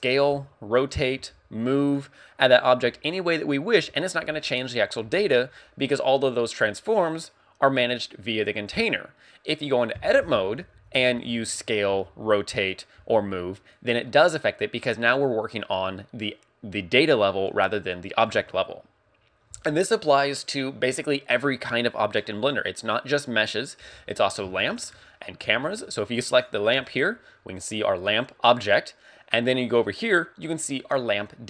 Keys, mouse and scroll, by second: 0.2 right click, 0.3 r, 0.9 right click, 1.3 g, 2.0 right click, 6.4 click, 10.3 Tab, 10.7 a, 11.0 s, 11.7 right click, 12.0 r, 12.7 right click, 13.0 g, 13.9 right click, 18.3 Tab, 18.6-19.0 scroll up 3, 24.1 scroll down 3, 24.7 shift+middle click, 25.1-25.4 scroll down 2, 25.7 shift+middle click, 26.4 right click.